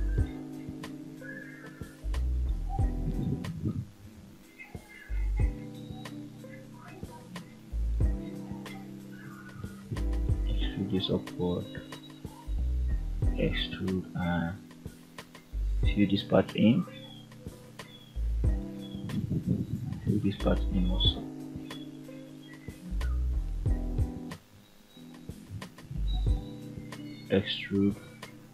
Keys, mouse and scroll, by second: 0.9 click, 1.2 g, 2.5 click, 2.7 g, 3.2 click, 3.6 scroll down 2, 3.9 middle click, 4.7-5.1 scroll up 2, 5.3 shift+middle click, 5.9 middle click, 7.4 click, 7.9 shift+click, 9.0 e, 10.3 click, 10.8 middle click, 12.0 click, 12.9 e, 13.9 click, 14.8 shift+click, 15.7 ctrl+click, 16.8 f, 17.6 click, 18.7 ctrl+click, 19.6 shift+click, 20.2 f, 20.5 middle click, 21.5 scroll up 2, 22.4 click, 23.0 shift+click, 23.6 shift+middle click, 24.7 shift+scroll up 1, 26.1 e, 27.4 click, 28.0 e.